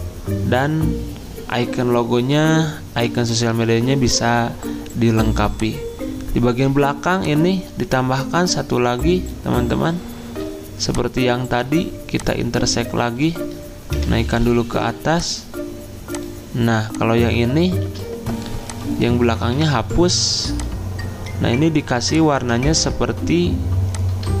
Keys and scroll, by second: 13.9 ctrl+Home, 17.8 ctrl+z, 19.5 Delete, 22.6 ctrl+z.